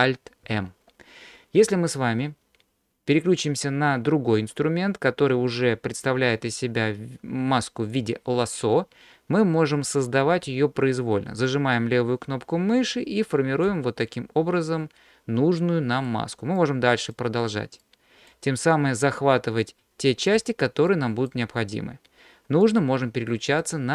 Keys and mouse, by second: 0.5 alt+m, 3.3-8.0 drag, 11.5-13.7 drag, 14.7-16.1 middle drag, 16.7 click, 17.9 click, 19.8 click, 20.9 click, 22.7-23.7 drag.